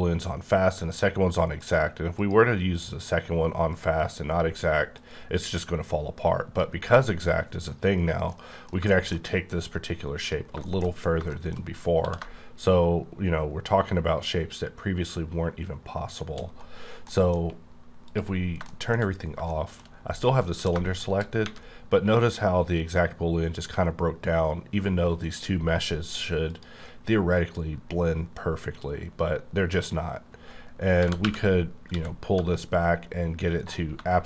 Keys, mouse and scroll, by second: 1.6 click, 2.1 click, 3.7 click, 4.9 click, 7.7-8.2 scroll down 4, 8.2 middle click, 10.1 click, 10.6 shift+middle click, 10.8 shift+scroll up 4, 11.3 middle click, 11.9 s, 16.7-17.1 scroll down 3, 17.1 middle click, 18.1 click, 18.6 shift+middle click, 19.1 scroll up 2, 19.5 shift+middle click, 20.4 s, 26.8 click, 31.0 g, 31.2 y, 31.9 x, 33.6 click.